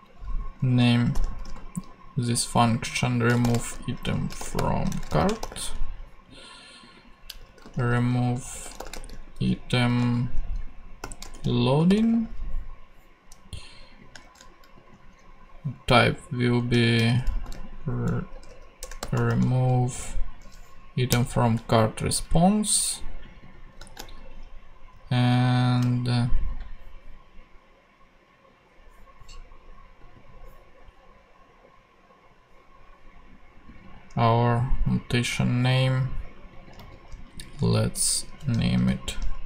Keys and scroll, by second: 0.7-1.9 typing, 3.2-5.9 typing, 7.1-12.4 typing, 14.2 shift+Tab, 16.5-19.8 typing, 21.1 Return, 24.0 shift+r, 24.9 shift+e, 36.8 super+c, 37.6 super+v.